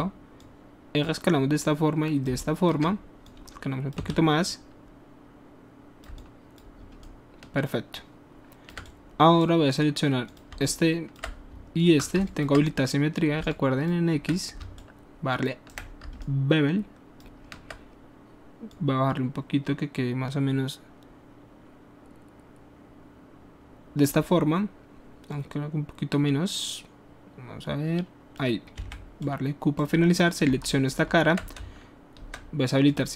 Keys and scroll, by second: 4.1 w, 28.8 q.